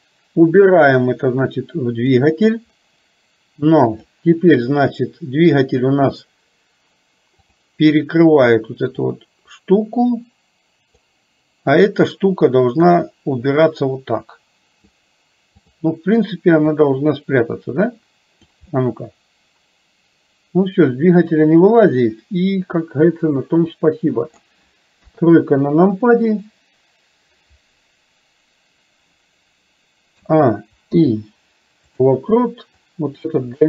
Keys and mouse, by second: 4.0 click, 9.0-11.1 drag, 12.0 click, 13.1-15.1 drag, 15.7 click, 16.8-18.6 drag, 18.8-24.6 middle drag, 25.1 KP_3, 30.2 a, 30.9 i, 32.8 click.